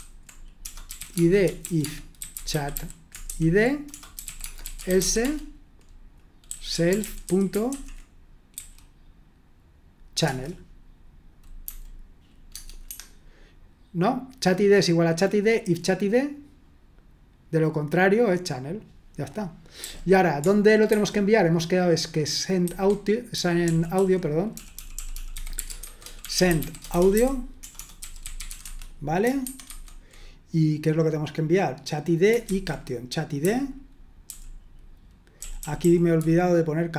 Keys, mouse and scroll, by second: 0.0-5.2 typing, 6.4-8.5 typing, 10.2 Return, 11.6 typing, 12.5 Tab, 12.8 Escape, 19.7 j, 20.9 super+2, 22.6 super+1, 23.3-29.4 typing, 29.4 Escape, 32.5 super+1, 33.4-34.3 typing, 35.3-36.9 typing.